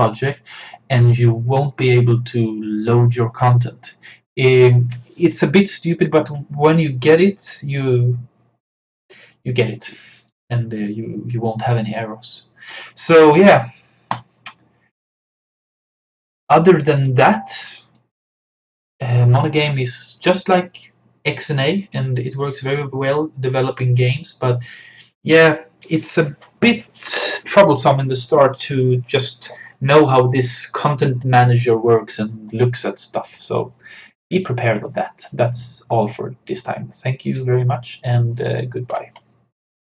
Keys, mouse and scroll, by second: 14.1-20.4 drag, 33.1 click, 36.8 typing, 38.1 click.